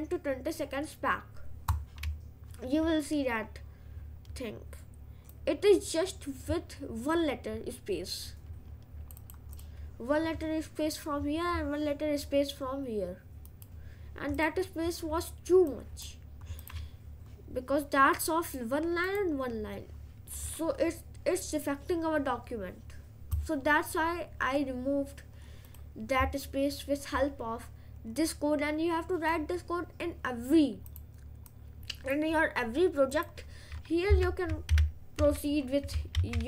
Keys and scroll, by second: 34.3 Return, 34.8 ctrl+/, 36.2 ctrl+z.